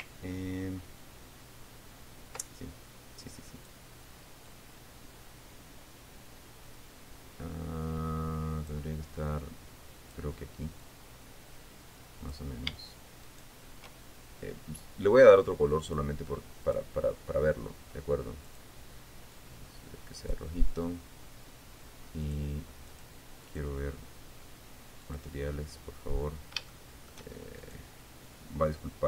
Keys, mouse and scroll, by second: 3.1-4.4 ctrl+drag, 5.0-9.4 drag, 10.0 click, 11.4-13.0 drag, 13.8 shift+right click, 16.4 click, 17.2 click, 19.0 click, 19.9 click, 22.8 click, 23.4 click, 24.0 click, 25.6 click, 26.7-27.1 scroll up 1, 27.2 shift+middle click, 28.2 shift+right click.